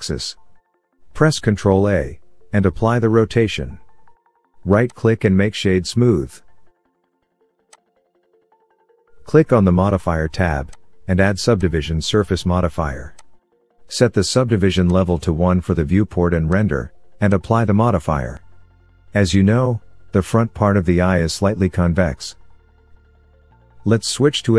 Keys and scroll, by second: 0.1 KP_Enter, 2.7 ctrl+a, 24.4 Tab.